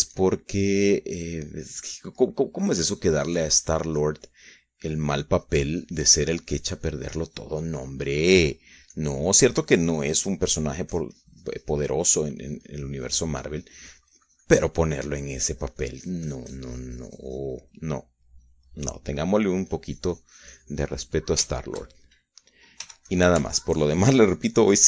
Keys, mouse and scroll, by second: 2.7-4.7 middle drag, 4.7-6.7 drag, 6.7 middle click, 6.9-10.1 drag, 10.1 click, 10.7-12.1 drag, 12.3-14.3 drag, 14.4-17.0 drag, 17.2-20.2 drag, 20.5 click, 21.3-24.1 drag, 24.6 f.